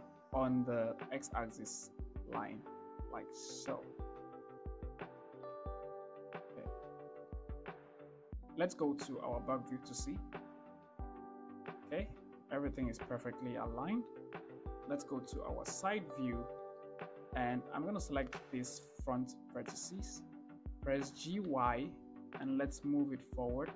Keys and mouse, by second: 5.5 shift+click, 6.9 shift+middle click, 7.6 shift+middle click, 9.7 ctrl+KP_1, 14.8 KP_3, 16.4 shift+middle click, 17.9 click, 20.7 g, 21.0 y.